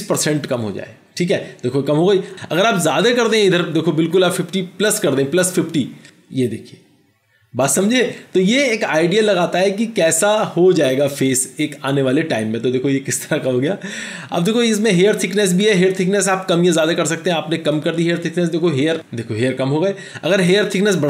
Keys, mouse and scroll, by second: 14.8 double click.